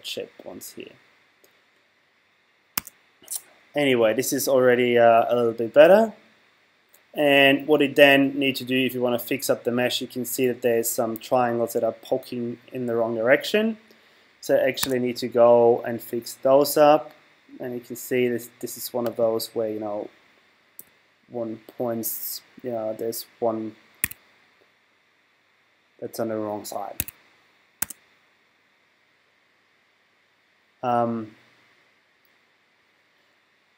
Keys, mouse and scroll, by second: 2.8 Tab, 14.8 Tab, 19.0-20.8 right drag, 20.8 g, 27.0 Escape, 27.8 Tab.